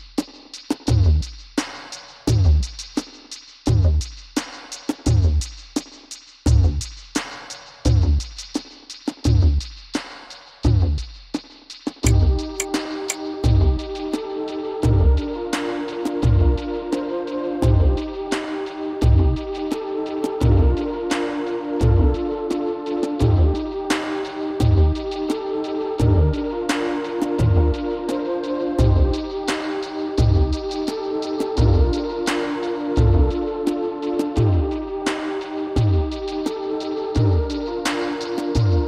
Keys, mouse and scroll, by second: 5.9-9.2 drag, 11.5 Tab, 12.2-13.8 middle drag, 13.9 middle click, 17.6-20.9 drag, 24.6-28.1 drag, 28.9 KP_3, 29.7-33.0 middle drag, 32.2 Tab, 34.1 ctrl+r.